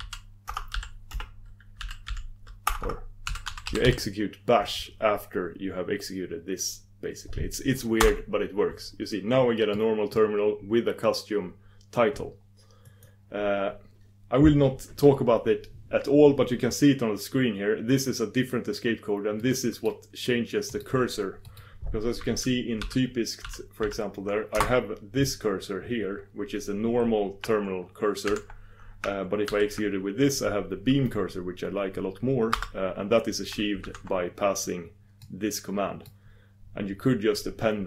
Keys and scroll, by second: 8.3 ctrl+super+Return, 13.2 ctrl+super+Return, 24.6 ctrl+super+Return, 29.6 super+v, 33.9 super+v, 35.2 super+v.